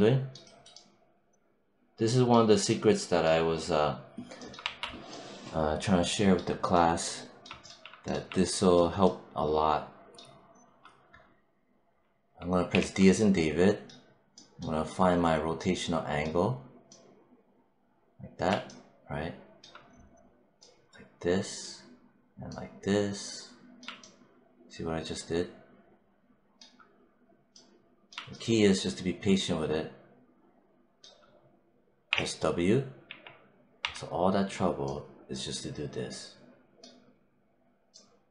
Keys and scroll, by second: 4.5 1, 12.6 d, 31.9 w, 32.9 3.